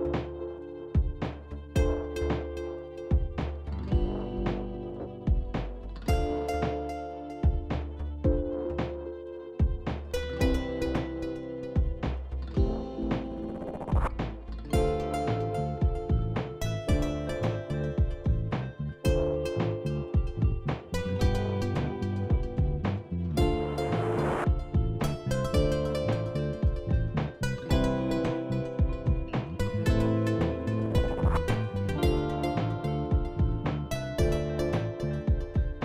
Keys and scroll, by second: 19.4 Down, 19.6 Down, 19.7-22.3 Down, 27.1 typing, 27.3 Return, 35.3-35.8 typing.